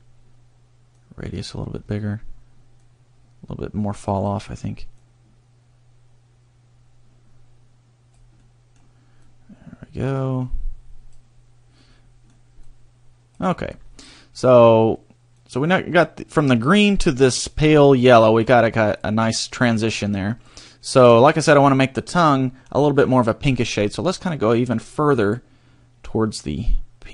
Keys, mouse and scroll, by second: 0.9 click, 1.8-2.8 scroll down 1, 2.8 click, 5.0 click, 8.5 middle click, 9.2 click, 11.8 middle click, 12.7 click, 13.7 scroll down 1, 15.4 click, 16.4 click, 17.6 click, 20.2 click, 23.8 click.